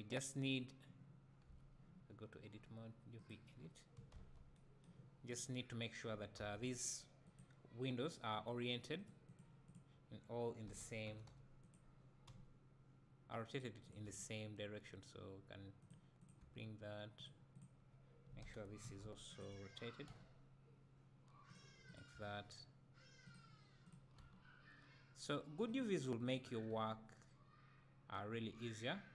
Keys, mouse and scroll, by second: 1.5 Tab, 3.2 click, 4.1 a, 5.3 click, 10.7 r, 11.7 click, 12.3 g, 13.6 click, 14.0 g, 15.9 click, 16.4 g, 17.6 click, 18.4 r, 19.4 click, 20.1 g, 21.5 click, 22.1 g, 23.3 click, 24.2 g, 25.7 click, 26.7 g.